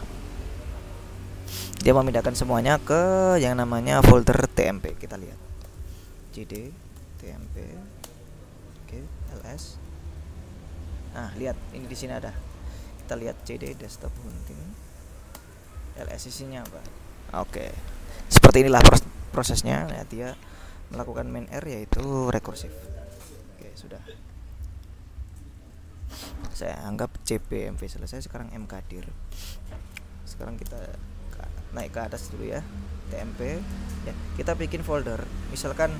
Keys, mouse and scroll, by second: 3.5-3.9 scroll up 2, 4.3-5.3 scroll down 2, 5.8 ctrl+l, 6.3 ctrl+c, 6.5-8.0 typing, 9.1-10.1 typing, 11.6 click, 12.6 click, 13.2-14.9 typing, 15.4 Return, 16.2 s, 16.8 Return, 21.1-22.9 typing, 23.6 ctrl+l, 25.5 click, 27.3 click, 28.2-29.3 drag, 30.5 c, 30.7 space, 31.6 ., 31.9 Return, 33.4-34.3 typing.